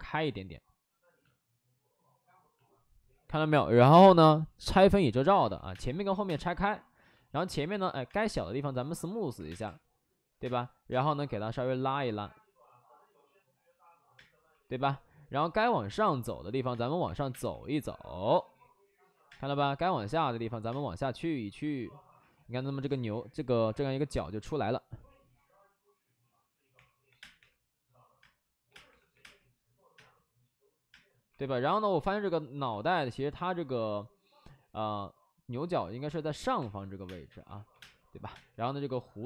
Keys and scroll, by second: 5.3-6.2 typing, 8.0 space, 9.3 3, 9.4 space, 10.3 space, 14.1 space, 14.4 w, 15.4-17.2 typing, 19.2 space, 20.6 space, 22.1 w, 26.7-31.2 typing, 32.6 ctrl+z, 36.6-38.2 typing.